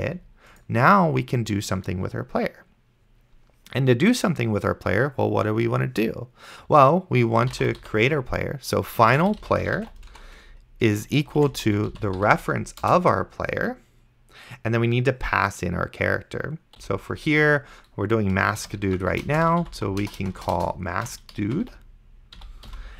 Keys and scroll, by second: 7.3-12.7 typing, 12.9 Return, 16.8 ;, 18.6-22.7 typing, 22.4 End.